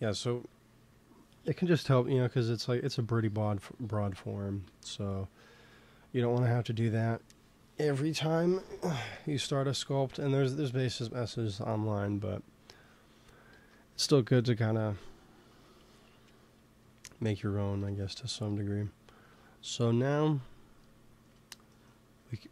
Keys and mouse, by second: 3.2 KP_3, 4.5 ctrl+s, 13.4 ctrl+s, 17.7 KP_1, 21.7-22.5 middle drag.